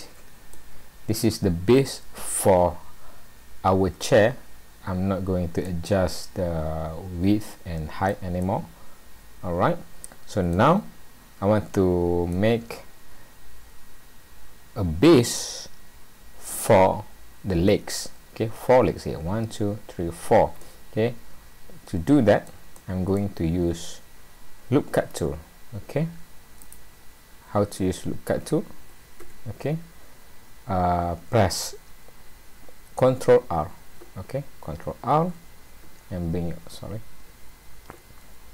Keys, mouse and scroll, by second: 4.7-5.3 scroll up 2, 5.3-5.6 scroll down 2, 5.6 middle click, 8.5 middle click, 11.0-11.3 scroll up 1, 12.3 middle click, 20.6 middle click, 22.8 middle click, 26.7 right click, 35.1 alt+r.